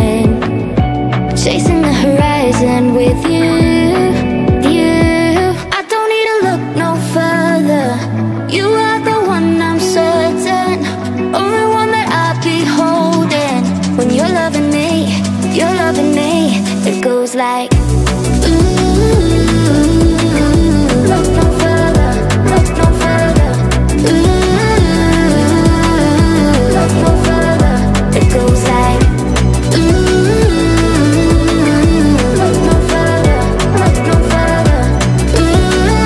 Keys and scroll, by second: 1.0 space, 7.1 space, 20.4-22.7 typing, 29.8 Caps_Lock, 29.9-34.1 typing, 30.0 Caps_Lock, 31.5 Caps_Lock, 35.3 BackSpace.